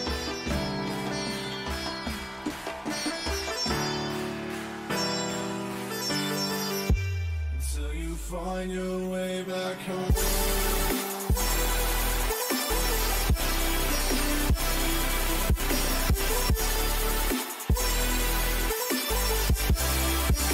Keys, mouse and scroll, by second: 18.5-20.5 middle drag.